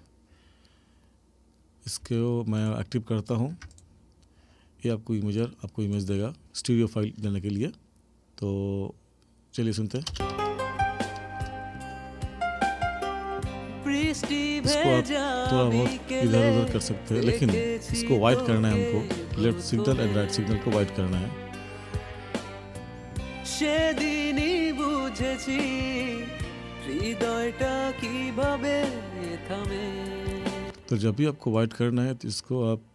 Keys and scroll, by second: 10.1 space, 30.6 space.